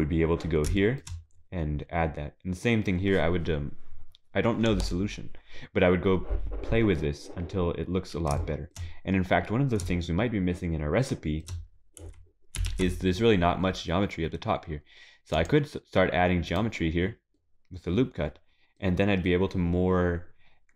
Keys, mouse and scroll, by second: 0.8 shift+middle click, 1.3-3.9 scroll up 4, 7.9-8.3 scroll down 4, 8.4 shift+middle click, 10.0 shift+middle click, 12.7 ctrl+r, 16.9-17.4 scroll down 4, 17.4 middle click, 20.4-20.7 scroll up 5.